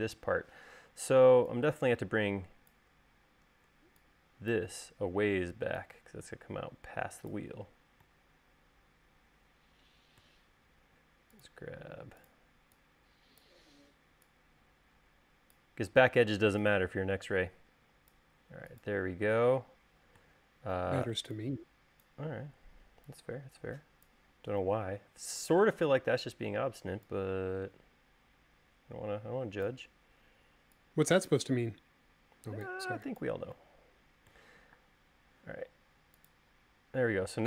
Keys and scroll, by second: 35.4 space.